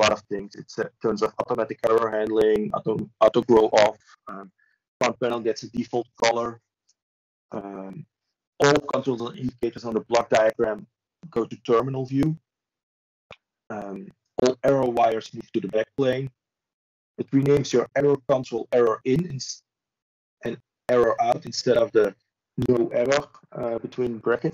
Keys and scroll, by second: 5.0 ctrl+z, 6.8 ctrl+space, 7.0 ctrl+a, 12.4 ctrl+a, 13.5 Escape, 14.8 ctrl+z, 16.6 ctrl+space, 17.8 ctrl+shift+a.